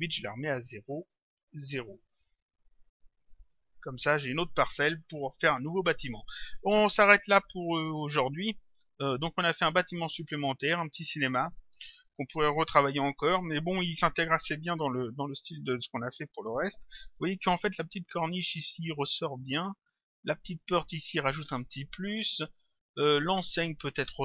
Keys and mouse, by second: 0.9 click, 2.7 Return, 3.4 click, 8.7 click, 10.6 click.